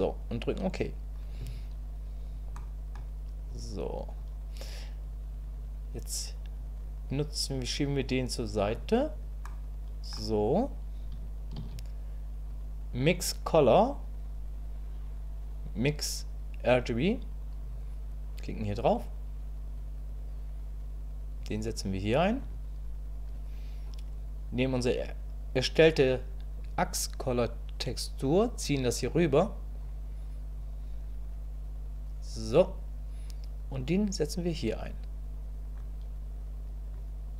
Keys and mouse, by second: 2.6 click, 6.7-8.7 drag, 9.5 click, 11.6 shift+a, 21.4-22.4 drag, 26.7-29.8 drag, 30.7-32.4 drag, 33.8-35.8 drag.